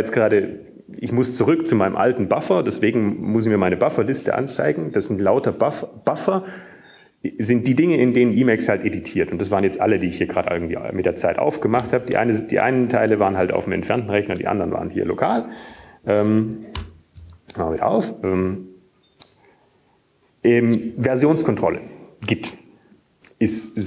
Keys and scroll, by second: 15.7 typing, 17.3 typing, 19.5 typing, 20.8 typing.